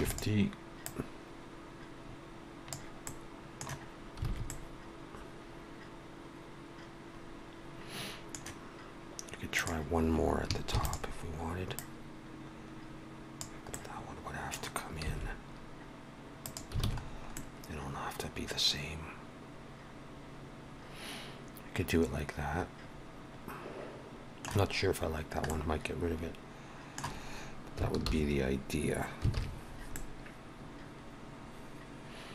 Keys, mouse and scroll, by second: 0.8 click, 3.0 middle click, 4.2 alt+a, 4.4 middle click, 9.5 click, 10.7 shift+d, 11.7 click, 13.7 middle click, 15.0 s, 16.8 alt+a, 17.0-17.3 scroll down 2, 17.3 middle click, 25.2 scroll down 2, 25.4 middle click, 28.0 alt+h, 29.6 alt+a, 29.6 scroll down 2, 29.9 middle click.